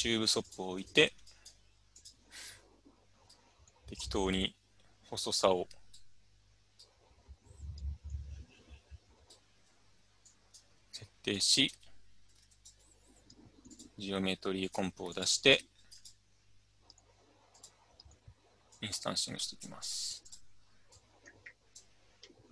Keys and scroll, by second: 11.7 Tab, 12.3 typing.